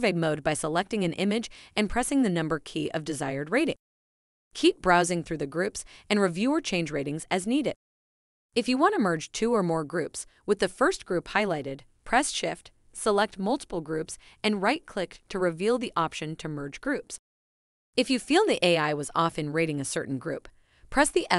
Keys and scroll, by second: 6.7 Right, 9.6 Right.